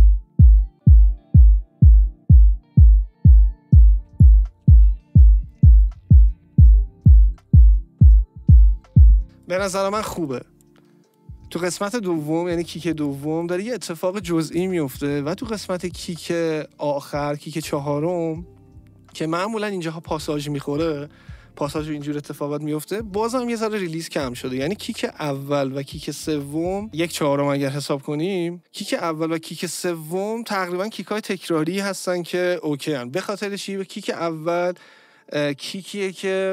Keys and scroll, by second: 9.2 space.